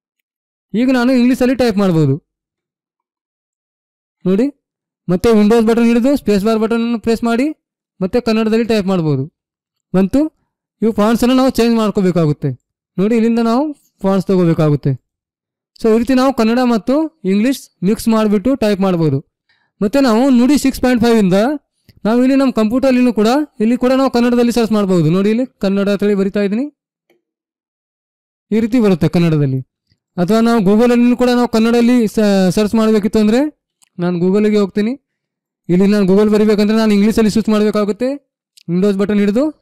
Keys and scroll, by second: 2.2-4.7 typing, 8.2 k, 31.9 BackSpace.